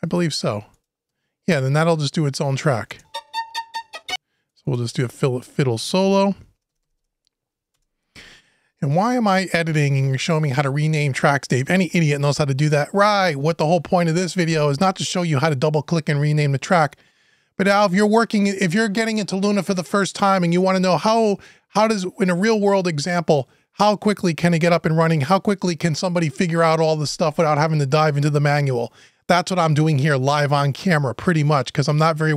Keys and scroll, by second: 5.8 Right, 6.3 BackSpace, 7.5 Return.